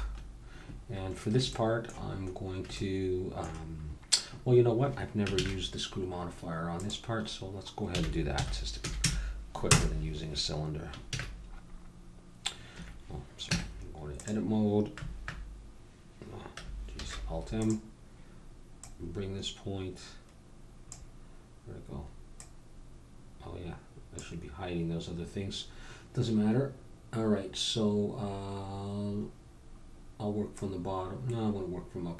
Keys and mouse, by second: 0.1-5.3 middle drag, 5.3 shift+a, 7.9 r, 11.1 shift+a, 13.4 Tab, 17.6 alt+super+m, 18.8-20.7 drag, 22.4-26.3 drag, 26.3-30.5 middle drag, 30.5-32.1 drag.